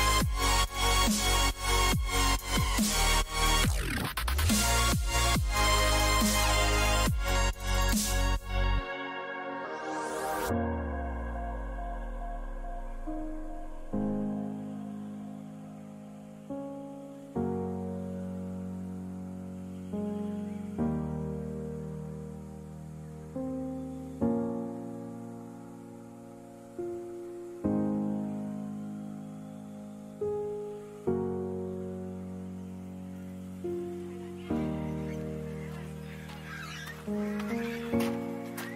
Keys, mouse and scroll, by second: 3.9 ctrl+r, 6.2 a, 7.1 b, 8.8-10.9 drag, 12.6 a, 14.1 ctrl+z, 14.5 ctrl+z, 14.8 ctrl+z, 15.0 ctrl+z, 15.2 ctrl+z, 15.5 ctrl+z, 15.7 ctrl+z, 15.9 ctrl+z, 16.4 ctrl+z, 16.8 ctrl+z, 17.2 ctrl+z, 17.6 ctrl+z, 17.9 ctrl+z, 18.2 ctrl+z, 18.4 ctrl+z, 18.6 ctrl+z, 19.5 ctrl+z, 19.9 ctrl+z, 20.3 ctrl+z, 20.7 ctrl+z, 21.1 ctrl+z, 21.4 ctrl+z, 21.7 ctrl+z, 22.0 ctrl+z, 22.4 ctrl+z, 22.8 ctrl+z, 24.6 a, 37.6 a, 38.0 a.